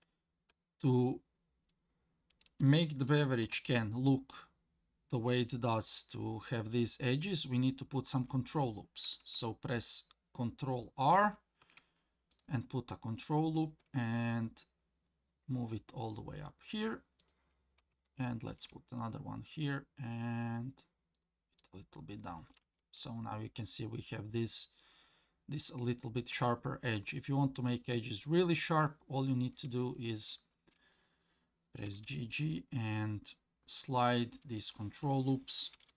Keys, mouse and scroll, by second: 1.7 middle click, 3.4 KP_1, 11.2 ctrl+r, 18.5 ctrl+r, 21.6 middle click, 22.6 Tab, 23.0-25.7 middle drag, 25.9 scroll down 2, 26.4-26.8 middle drag, 27.1 scroll up 2, 28.1-29.1 scroll down 1, 29.2 scroll up 1, 29.7 Tab, 31.9 g, 34.8 alt+click, 35.7 g.